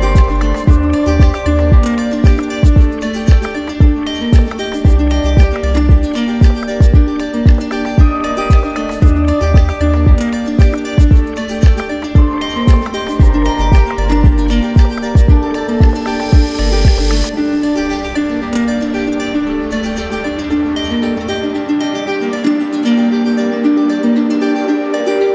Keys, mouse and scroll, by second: 0.5 w, 5.2 click, 6.2 click, 6.5 alt+click, 7.0 ctrl+click, 8.4 ctrl+click, 9.0 ctrl+click, 11.5 click, 12.6 alt+click, 13.6 ctrl+click, 14.6 ctrl+click, 15.0 ctrl+click, 17.4 click, 18.0 ctrl+click, 18.9 click, 19.4 click, 21.1 ctrl+click, 21.7 ctrl+click, 23.5 click, 24.0 ctrl+click.